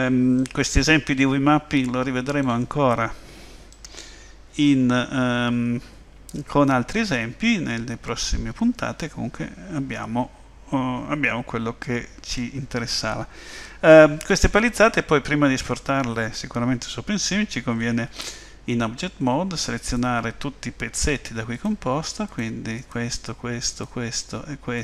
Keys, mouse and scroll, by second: 0.4 middle click, 3.7 middle click, 19.8 click, 21.5 shift+click, 22.3 click, 22.8 click.